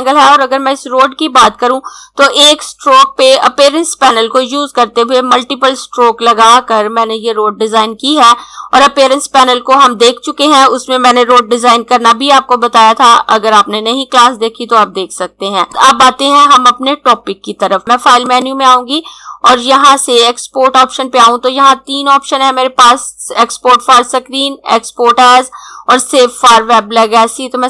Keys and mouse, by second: 15.2 click, 18.3 click.